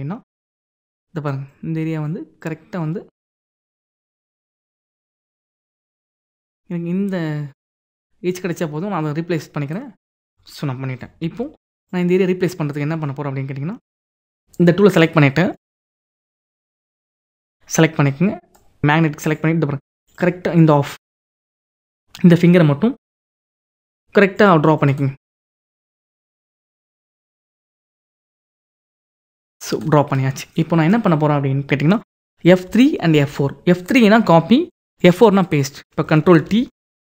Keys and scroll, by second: 10.8 ctrl+d, 32.2 F3, 33.5 F4, 36.0 ctrl+t.